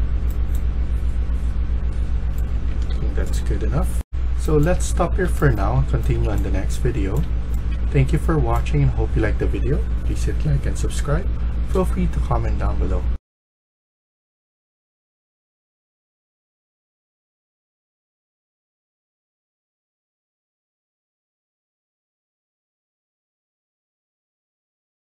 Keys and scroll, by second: 0.0-0.1 typing, 2.4-3.3 typing, 3.8 F1, 4.4-7.6 typing.